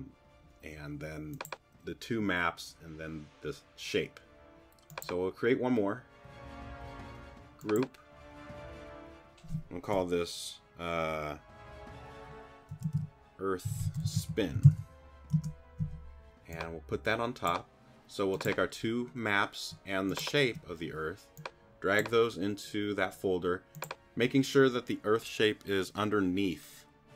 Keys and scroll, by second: 12.5-15.1 typing, 15.3 Return.